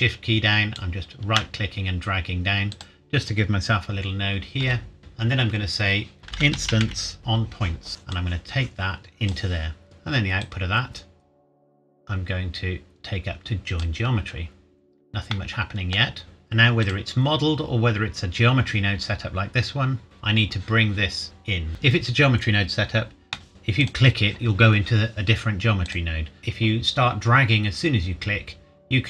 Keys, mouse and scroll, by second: 2.7 click, 4.6 g, 5.0 shift+middle click, 6.2 click, 6.3-7.7 typing, 7.9 click, 10.4 click, 15.3 middle click, 16.0 scroll down 1, 16.2 click, 21.7 Delete, 23.5 click.